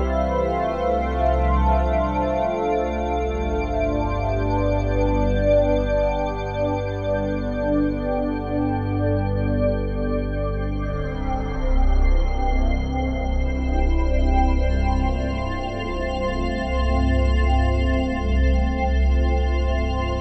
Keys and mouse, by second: 2.7-3.0 typing, 4.1-4.8 typing, 5.4-7.5 ctrl+alt+drag, 5.9 typing, 6.9-7.7 typing, 7.7-9.7 alt+shift+drag, 12.8 click, 13.6-14.3 typing, 15.1-16.0 drag, 16.1 typing, 17.5 click, 18.3-18.7 typing, 19.8-20.2 typing, 20.0-20.2 drag.